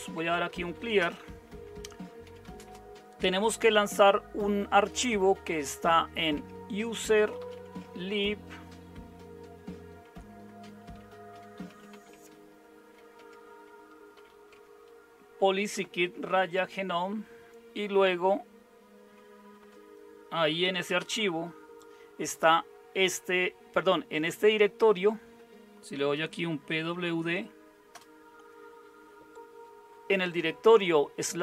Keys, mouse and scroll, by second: 0.0-3.4 typing, 5.2-8.0 typing, 10.6-14.6 typing, 15.8-16.6 typing, 19.6 Return, 20.4-21.3 typing, 26.2-27.2 typing, 27.9 Return.